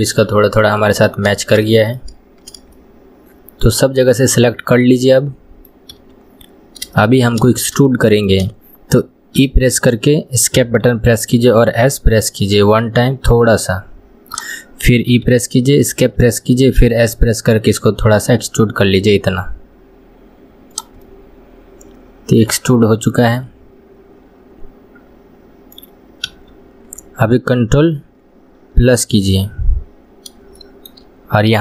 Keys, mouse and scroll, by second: 2.2-2.8 scroll down 2, 2.8-5.8 middle drag, 6.0 KP_1, 6.7-7.0 scroll down 1, 7.0 shift+middle click, 7.6 scroll up 2, 7.9-9.4 shift+middle drag, 9.4 e, 21.1-24.1 middle drag, 28.9 ctrl+KP_Add, 30.1 scroll up 1, 30.6 shift+middle click, 31.2 scroll up 1.